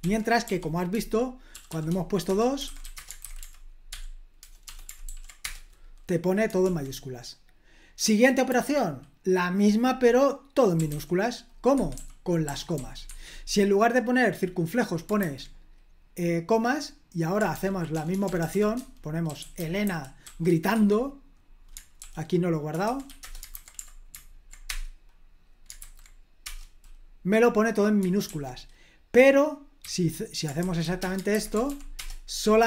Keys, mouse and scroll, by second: 0.0 super+l, 0.4 i, 1.7-3.9 typing, 2.3 Escape, 3.2 super+h, 5.1 ctrl+p, 5.4 Return, 6.6 super+l, 8.5 h, 10.5-13.2 typing, 15.2 super+h, 17.5 ctrl+p, 17.9-20.7 typing, 22.0 super+l, 22.8-23.6 typing, 24.6 Return, 25.8 super+h, 26.4 Return, 28.2 super+l, 29.8-31.3 typing, 31.6 ctrl+p, 31.9 Return.